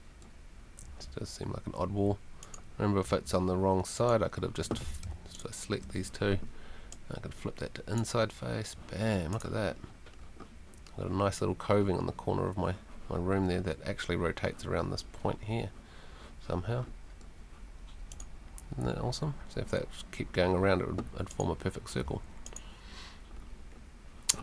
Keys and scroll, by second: 0.8 Escape, 3.1 Escape, 18.9 Escape, 22.0 Escape.